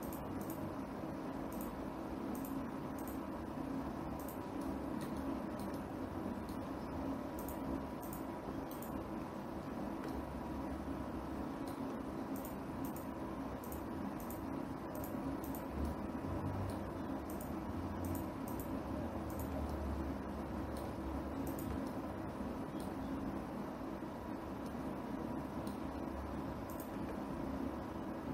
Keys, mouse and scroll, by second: 0.6 shift+click, 1.0 shift+click, 2.1 shift+click, 2.9 shift+click, 3.6 shift+click, 4.8 shift+click, 5.2 middle click, 6.0 shift+middle click, 6.4 middle click, 8.2 shift+click, 8.6 shift+click, 9.3 shift+click, 10.7 middle click, 13.0 shift+click, 13.5 shift+click, 14.2 shift+click, 14.8 shift+click, 15.5 shift+click, 16.1 shift+click, 16.5 middle click, 17.9 shift+click, 18.6 shift+click, 19.1 shift+click, 19.9 shift+click, 20.4 middle click, 22.0 shift+click, 22.5 middle click, 23.7-25.2 scroll down 1, 25.2 scroll down 1, 25.3 middle click, 27.3 shift+click.